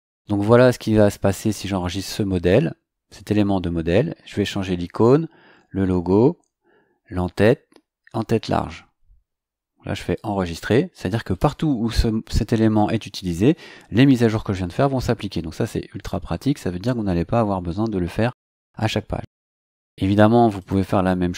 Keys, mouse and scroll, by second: 10.1 click, 20.5 click.